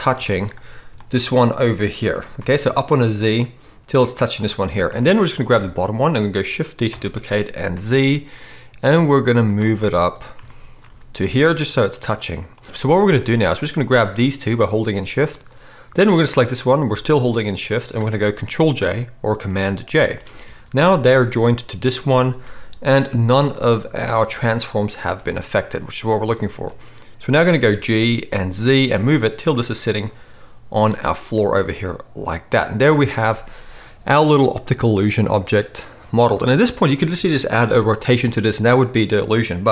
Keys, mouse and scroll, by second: 2.1 g, 6.9 shift+d, 10.8 g, 14.9 shift+click, 20.0 ctrl+j, 22.4 n, 23.5 click, 25.1 n, 27.6-39.7 middle drag, 27.6 g.